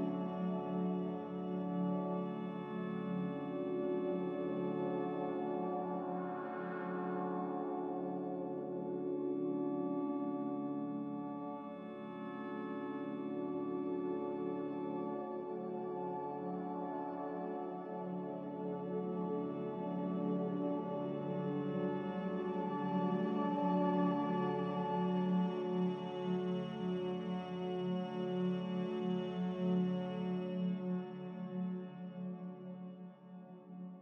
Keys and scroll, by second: 5.8 x, 6.8 z, 7.6 x, 10.0-10.9 typing, 11.5 Return, 16.5 typing, 18.8 typing, 19.3 Return, 21.1 typing, 22.6-23.0 typing, 24.6-25.3 typing, 27.0 b, 28.1 Delete, 31.0 a, 32.4 q.